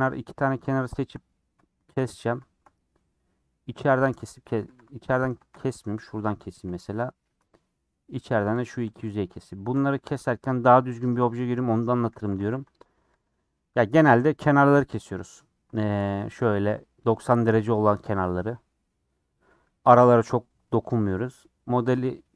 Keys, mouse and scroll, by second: 0.0-1.1 middle drag, 1.1 shift+Left, 1.5 middle click, 2.1-2.4 scroll up 3, 2.4-4.4 middle drag, 4.4 click, 4.7 2, 5.1 alt+click, 6.1 ., 6.6 middle click, 7.2 scroll up 1, 7.3 3, 8.1 click, 8.3-9.6 middle drag, 9.6 click, 10.4-11.4 scroll down 14, 11.5 middle click, 11.7-12.1 scroll up 8, 12.3 a, 12.5 u, 14.2 middle click, 15.2 scroll up 2, 15.7 middle click, 16.4 click, 18.7 scroll down 2, 18.9-22.3 middle drag.